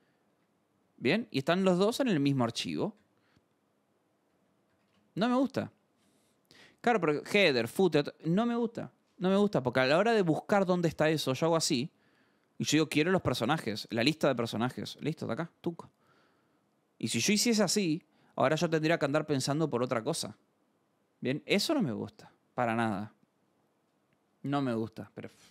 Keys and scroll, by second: 0.0-2.9 typing, 0.2 Escape, 0.8 Escape, 1.4 Escape, 4.2 d, 4.7 k, 4.9 ctrl+s, 5.6 alt+Tab, 9.3 alt+Tab, 10.2-11.2 typing, 12.6-14.9 typing, 15.0 Down, 15.2 Return, 17.1 space, 20.2 alt+Tab, 22.1 scroll.